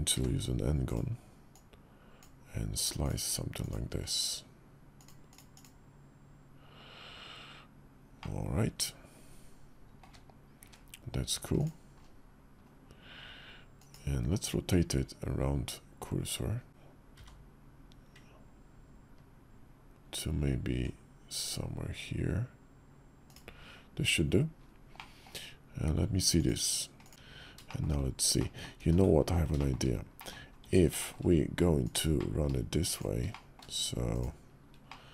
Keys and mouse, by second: 1.3 click, 8.0-9.8 middle drag, 9.8 `, 10.4 `, 13.5 click, 16.9 r, 24.7 middle click, 26.1 click, 27.1 f, 27.1 `, 27.4 shift+click, 28.1 click, 28.6 ctrl+z, 30.0 click, 30.4 Tab, 30.7 shift+middle click, 31.6 click, 32.0 middle click, 32.7 shift+click, 33.1 middle click, 33.9 shift+click, 34.6 middle click.